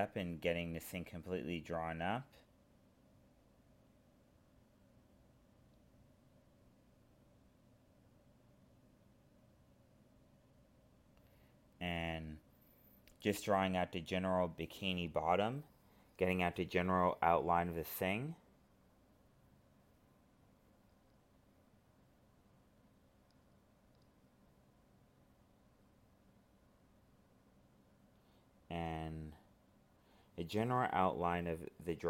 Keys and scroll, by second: 0.1 alt+space, 1.3 ctrl+z, 2.1 alt+space, 4.1 alt+space, 6.0 alt+space, 8.8 alt+space, 12.3 alt+space, 13.3 ctrl+z, 15.0 alt+space, 16.6 ctrl+z, 19.0 alt+space, 20.2 ctrl+z, 21.4 alt+space, 27.4 alt+space, 28.6 alt+space, 31.2 alt+space.